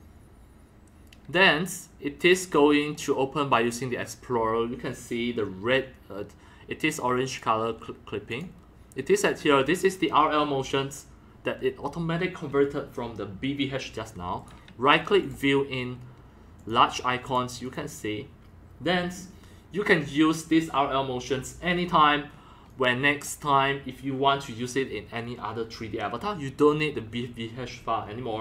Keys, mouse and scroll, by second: 1.5-2.6 drag, 2.7 click, 2.9-3.5 drag, 7.3 click, 8.3 click, 11.3-13.5 drag, 14.4 right click, 14.7-15.3 right drag, 15.2 click, 15.3-16.7 drag, 17.2 drag, 17.6 click, 22.7 click, 23.2-28.3 drag.